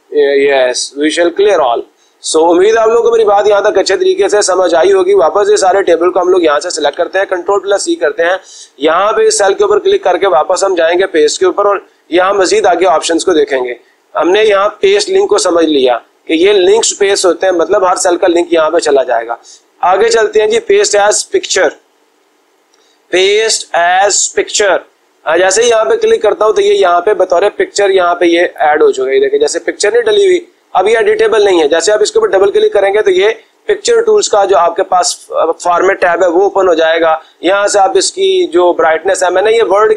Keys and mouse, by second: 1.7 click, 2.2 click, 6.4 click, 7.3 ctrl+c, 9.5 click, 11.4-12.4 drag, 25.5 click, 26.7-27.9 drag, 28.4 click, 29.9 click, 30.7 click, 31.1 click, 31.2 click, 31.4 click, 32.3 click.